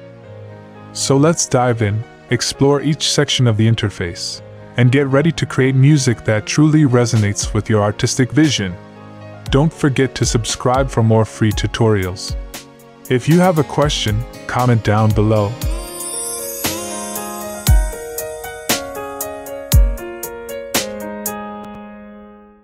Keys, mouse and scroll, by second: 5.1 click, 6.8 click, 8.2 drag, 8.6 click, 9.5 click, 11.9 click.